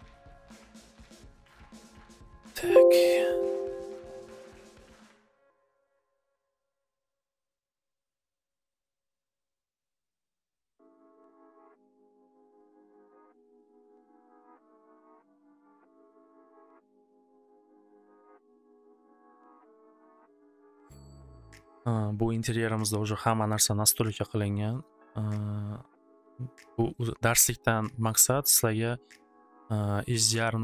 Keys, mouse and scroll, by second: 1.7 click, 4.3 click, 4.5 click, 5.5 c, 6.5 click, 6.7 click, 11.0 click, 12.1 click, 18.8 middle click, 19.3 click, 20.6 click, 24.2 click, 24.8 click.